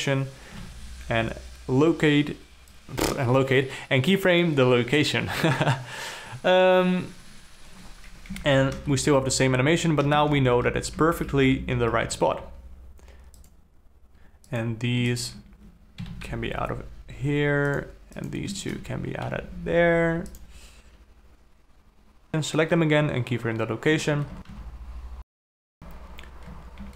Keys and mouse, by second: 1.0 i, 8.8 Down, 9.3 space, 10.6 space, 10.8 Down, 11.2 Up, 11.5 Down, 11.8 Up, 12.1 Down, 12.4 Up, 13.9 click, 14.1 shift+Left, 14.1 space, 15.0 click, 15.7 shift+click, 16.5 g, 18.7 click, 23.4 i, 26.1 shift+Up, 26.3 shift+Up.